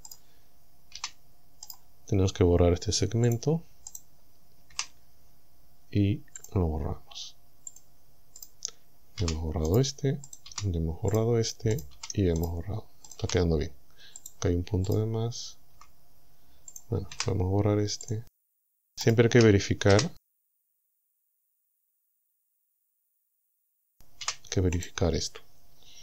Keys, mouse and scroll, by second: 0.1 right click, 1.0 g, 1.7 right click, 3.3 click, 3.9 right click, 4.7 Delete, 6.4 click, 7.7 click, 8.4 right click, 9.2 g, 9.7 right click, 10.3 right click, 10.5 g, 11.2 right click, 11.8 right click, 12.0 g, 12.4 right click, 13.1 right click, 13.3 g, 14.2 right click, 14.9 right click, 15.8 g, 16.7 click, 17.1 Delete, 18.1 click, 18.6 right click, 19.1 shift+right click, 19.9 f, 20.5 right click, 21.7 g, 22.4 right click, 23.6 right click, 24.3 g, 24.8 right click.